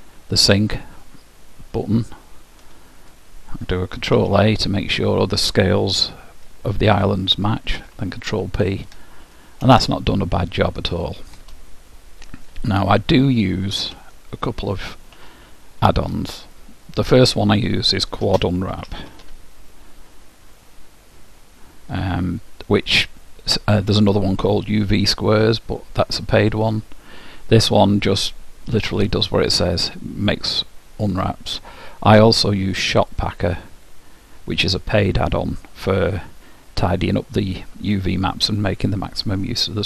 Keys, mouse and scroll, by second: 2.1-4.0 drag, 4.2 ctrl+a, 7.8 ctrl+p, 10.0-11.8 middle drag, 14.0 t, 15.4-18.4 middle drag, 18.4 space, 33.2-35.0 drag.